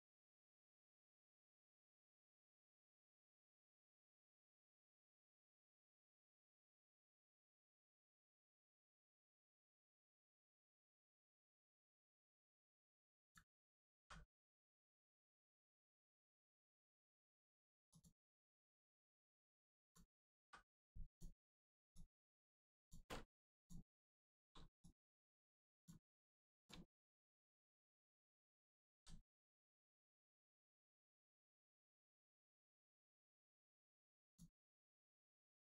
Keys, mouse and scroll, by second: 13.9 x, 17.8 click, 18.6 shift+middle click, 19.3 click, 19.4 click, 20.4 x, 21.0 click, 23.0 x, 23.5 click, 24.0 shift+middle click, 24.8 click, 24.8 click, 26.0 x, 26.5 click, 26.8 shift+middle click, 27.4 click, 27.5 click, 28.8 x, 30.0 click, 31.2 shift+middle click, 32.4 click, 32.5 click, 33.6 x, 34.2 click.